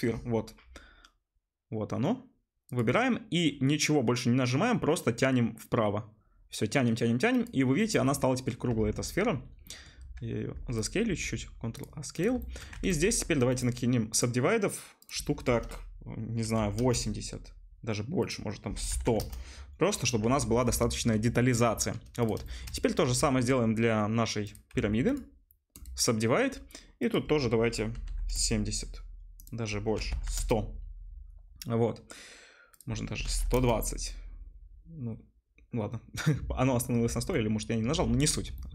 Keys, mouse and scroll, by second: 7.5-12.2 middle drag, 8.7 Tab, 10.0 s, 11.1 ctrl+a, 12.2 click, 12.2-22.3 shift+middle drag, 12.7 Tab, 15.0-27.1 drag, 15.0-22.3 right drag, 19.0 0, 20.2 Tab, 24.7 a, 27.1-31.0 middle drag, 30.2 0, 37.0 Tab, 38.4-38.7 shift+middle drag.